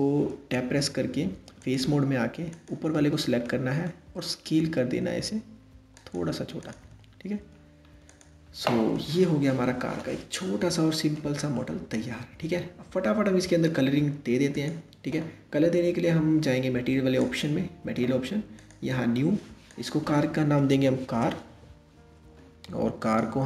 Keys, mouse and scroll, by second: 0.2 Tab, 1.2 click, 2.1 click, 3.1-4.0 middle drag, 4.0 s, 6.3 click, 6.5 Tab, 7.1-7.7 scroll down 3, 7.7 click, 8.5-14.2 middle drag, 14.2 click, 16.8 click, 18.2-22.3 drag, 22.6 click.